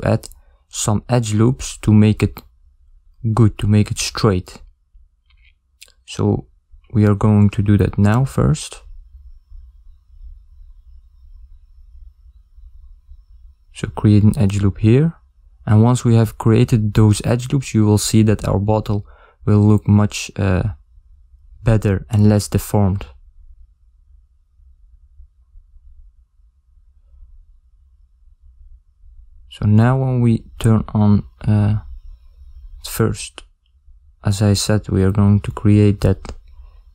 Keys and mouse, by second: 7.9-10.8 alt+middle drag, 9.1 ctrl+r, 16.6 ctrl+r, 16.6 a, 22.9 ctrl+r, 22.9 a, 27.9 ctrl+middle click.